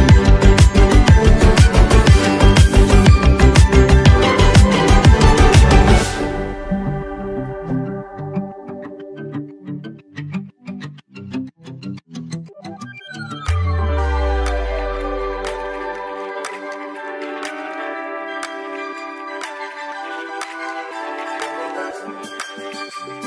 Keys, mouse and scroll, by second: 2.8 click, 4.8 Down, 18.1 Down.